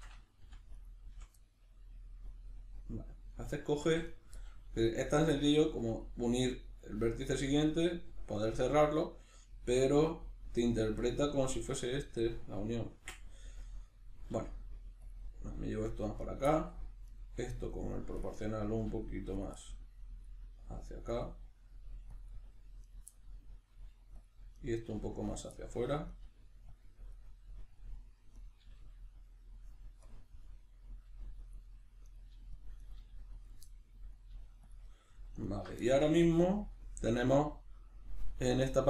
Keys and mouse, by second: 0.4 f, 0.7 right click, 1.1 f, 1.4-4.1 middle drag, 3.9 1, 4.1 right click, 4.4-15.1 middle drag, 14.3 g, 15.1 click, 15.2-16.2 middle drag, 16.2 right click, 16.5 middle click, 17.1 right click, 18.2 click, 18.7 g, 19.4 click, 19.6-21.1 middle drag, 20.6 g, 21.1 click, 21.2-22.2 middle drag, 21.8 g, 22.2 click, 22.2 middle click, 22.8 right click, 23.1-24.2 middle drag, 23.7 g, 24.2 click, 24.6 right click, 24.9 g, 25.4 click, 25.5 middle click, 26.1 right click, 26.2 g, 26.8 click, 27.1-28.3 middle drag, 28.3 right click, 28.6 g, 29.4 click, 30.3-31.5 middle drag, 31.1 g, 31.5 click, 31.7 middle click, 32.1 right click, 32.3 g, 32.7 click, 32.8 right click, 33.0 g, 33.5 click, 33.7-34.7 middle drag, 34.3 g, 34.7 click, 34.9 middle click, 35.4 alt+right click, 35.9-38.8 ctrl+middle drag.